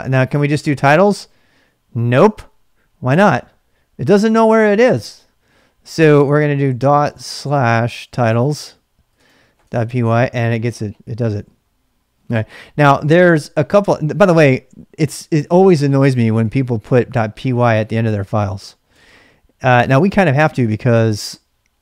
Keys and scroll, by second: 0.0-0.6 typing, 0.5 ctrl+[, 1.1 Return, 7.4-9.1 typing, 9.1 Tab, 9.6 Return, 13.0-13.8 typing, 14.1 ctrl+c, 16.6-20.6 typing.